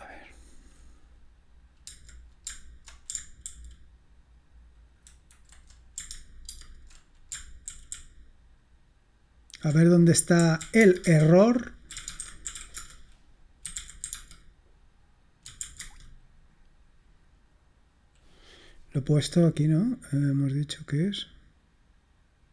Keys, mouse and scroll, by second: 3.5 ctrl+super+k, 6.6 ctrl+super+space, 7.7 alt+super+k, 8.1 alt+super+k, 8.6-10.0 alt+super+k, 10.4-16.0 typing, 19.8 click.